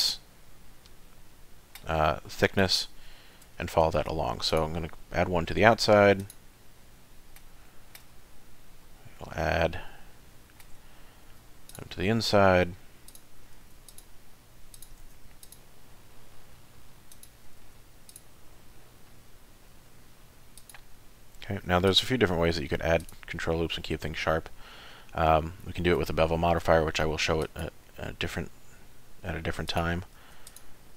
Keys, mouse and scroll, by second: 2.2 middle click, 3.5 scroll down 1, 4.0 ctrl+r, 6.5 middle click, 7.7 shift+middle click, 8.1 middle click, 9.2-9.5 scroll up 3, 9.6 scroll down 1, 10.0 shift+middle click, 11.3 ctrl+r, 13.6 ctrl+r, 15.0 ctrl+r, 17.6 ctrl+r, 20.9 middle click, 21.5 ctrl+r, 23.4 middle click, 26.5 ctrl+r, 30.2 ctrl+r.